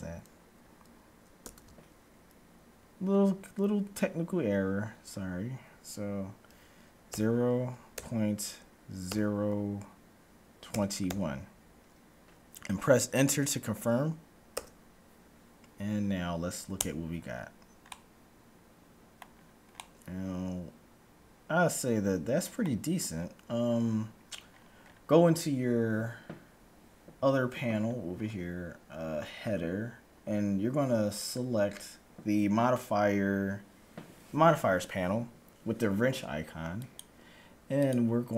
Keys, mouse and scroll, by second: 1.5 ctrl+b, 16.1-17.0 scroll up 1, 17.0 Tab, 17.0-17.3 scroll up 1, 17.3-21.6 middle drag, 23.0-24.5 scroll down 1, 24.5 middle click, 24.5 scroll down 1, 24.6-26.6 scroll up 1, 27.6-30.1 scroll up 1, 36.6-38.3 drag.